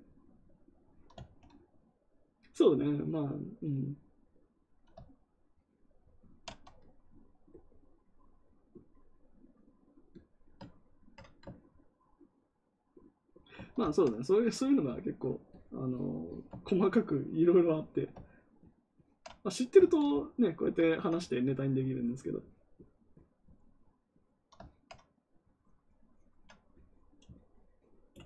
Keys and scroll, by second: 19.7 ctrl+z.